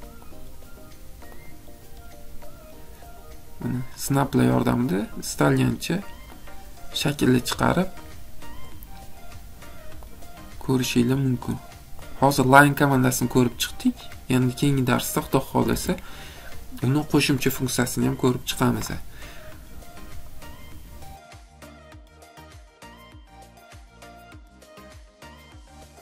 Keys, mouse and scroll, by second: 1.5 click, 6.5 click, 10.1 click, 12.1 click, 15.8 Escape.